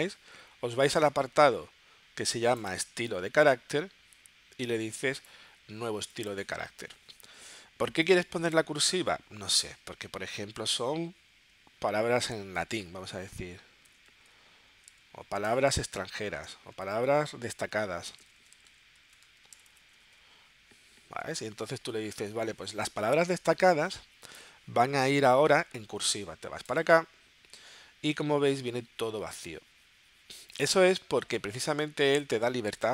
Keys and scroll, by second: 13.6-14.8 typing, 16.4-20.6 typing.